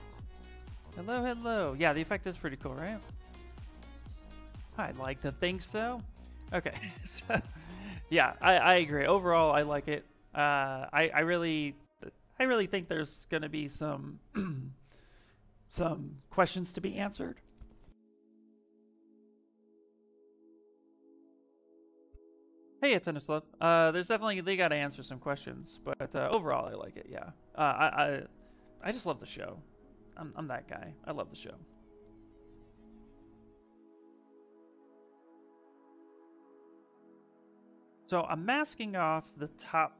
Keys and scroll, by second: 10.4 ctrl+space.